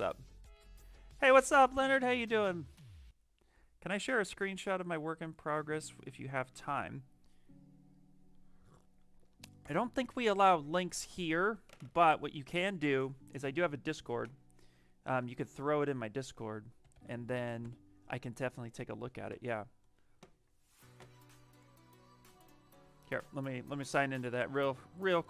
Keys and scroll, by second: 16.7 d, 17.5 Return.